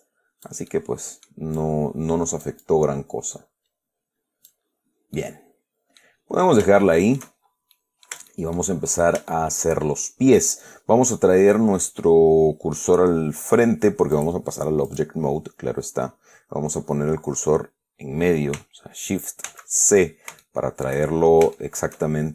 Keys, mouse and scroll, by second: 1.0 click, 1.9-5.0 drag, 5.0-5.5 scroll down 2, 5.5-6.5 drag, 6.5-7.3 scroll down 5, 7.1 shift+click, 7.5 shift+scroll up 2, 7.6-8.3 shift+scroll down 4, 8.0 click, 8.6-9.1 shift+middle drag, 9.6-10.1 shift+middle drag, 10.2-11.1 shift+scroll down 4, 11.2 scroll up 2, 14.4 click, 15.2 click, 15.5 middle click, 19.8 shift+c, 20.7-21.3 shift+middle drag, 21.8-22.3 shift+middle drag.